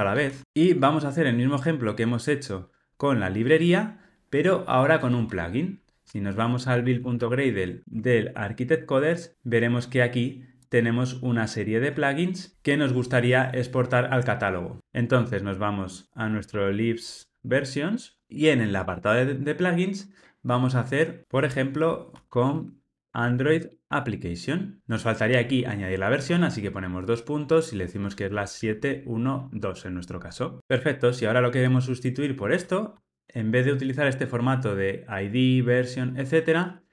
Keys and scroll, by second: 36.8 alt+shift+Right.